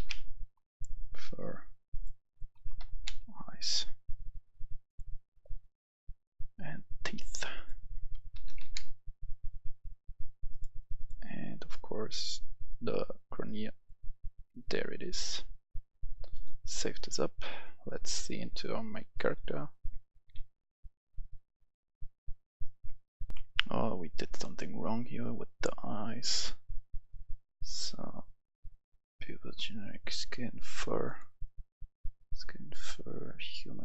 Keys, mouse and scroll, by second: 0.9 click, 2.5-3.0 typing, 3.5 click, 5.6-6.6 scroll down 1, 6.6 click, 8.2 t, 8.5 e, 8.7 e, 9.4-11.9 drag, 12.3-13.3 scroll down 1, 13.3-13.8 scroll up 1, 13.8 click, 18.3 click, 19.1 right click, 19.2 a, 19.3 w, 19.7 w, 20.2 w, 22.0 s, 23.2 click, 23.3 F10, 24.3-25.4 drag, 28.3 scroll up 1, 30.0-31.1 scroll down 1, 31.1 click.